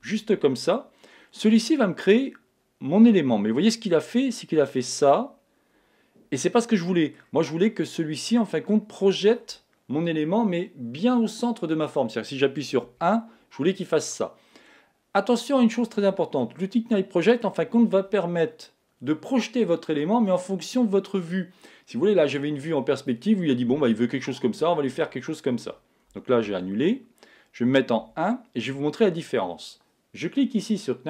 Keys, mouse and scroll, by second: 0.7-2.6 middle drag, 4.3-6.2 middle drag, 7.8-11.0 middle drag, 12.8 KP_1, 16.4-18.3 middle drag, 26.4 super+z, 28.0 KP_1.